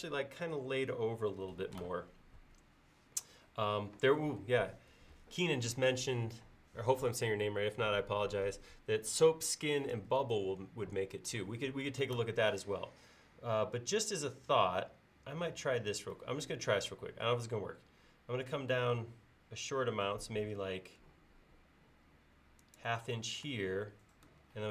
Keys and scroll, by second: 24.5 l.